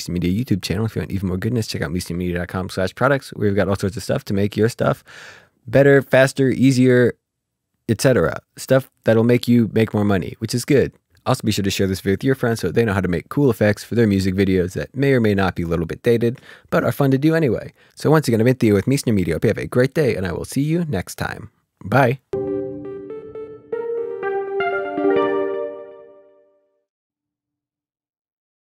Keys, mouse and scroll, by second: 10.9-22.3 ctrl+scroll up 1.